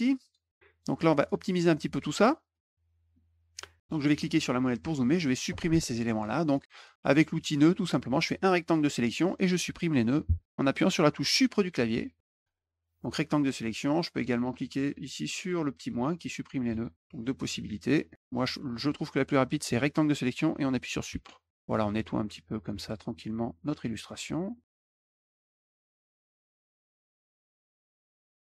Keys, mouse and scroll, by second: 0.2 click, 0.7 click, 2.5 middle click, 4.1 middle click, 4.4 middle click, 4.7 middle click, 5.1-6.2 drag, 6.7 click, 8.3 click, 9.5 middle click, 12.6 click, 16.7 click, 17.1 middle click, 17.6 middle click, 18.1 click, 21.4 click, 21.9 click, 23.1 middle click, 23.8 middle click, 24.5 middle click, 24.9 click, 25.1 click, 25.2 click, 25.4 middle click, 25.5 middle click, 25.6 click, 25.8 click, 25.9 click, 26.2 middle click, 26.4 click, 26.5 click, 26.7 click, 26.8 click, 26.9 click, 27.0 click, 27.2 click, 27.3 click, 27.5 click, 27.6 click, 28.0 click, 28.2 click, 28.3 middle click, 28.5 click.